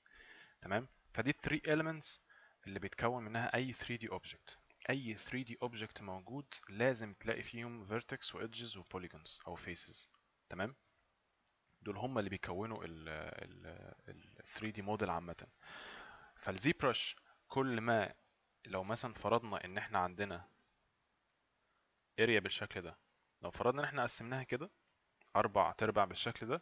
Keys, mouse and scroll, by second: 19.8 click.